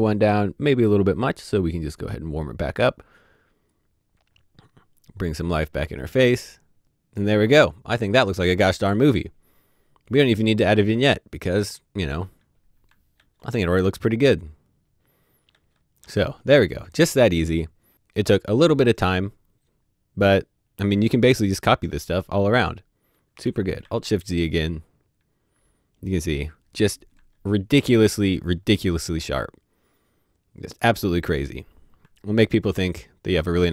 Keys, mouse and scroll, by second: 1.9 click, 3.6 click, 9.9-11.4 scroll down 1, 12.8-13.1 scroll down 1, 13.8 typing, 15.4 alt+d, 20.9 scroll up 1, 23.6 scroll up 2, 23.8 alt+shift+z, 27.1 alt+z, 27.2-28.2 typing.